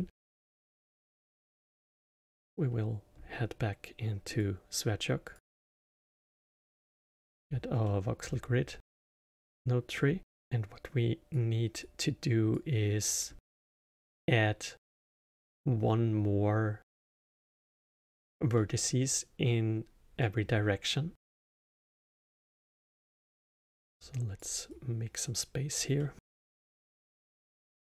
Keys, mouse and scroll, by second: 2.0-5.2 drag, 5.2-6.9 drag, 6.9 middle click, 7.4 scroll down 2, 7.8 middle click, 8.3 scroll down 2, 8.7 middle click, 9.2 scroll down 2, 9.9 middle click, 10.3 scroll up 4, 10.4 click, 11.8 click, 13.1 click, 13.4 scroll down 3, 16.9-20.7 alt+middle drag, 21.1 drag, 22.9 middle click, 23.3 scroll down 3, 23.7 click, 24.7-26.0 drag, 26.0-26.7 middle drag, 26.7 scroll up 1.